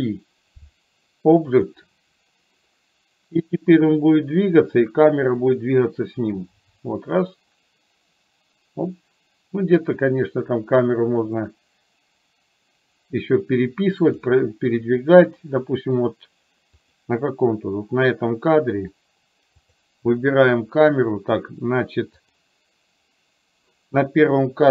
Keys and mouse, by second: 3.5-14.2 drag, 17.0 click, 19.6 click, 22.2 click.